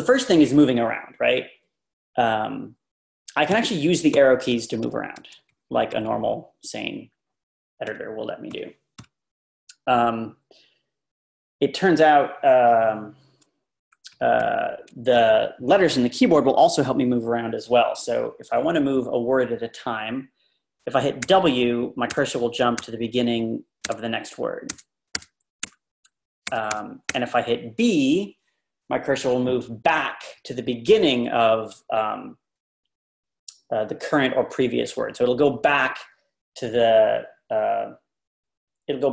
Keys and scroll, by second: 3.5 Down, 4.5 Right, 5.1 Right, 5.9 Left, 7.9 Left, 8.5 Down, 10.2 typing, 13.9 Up, 14.4 typing, 21.3 w, 25.1-27.0 typing.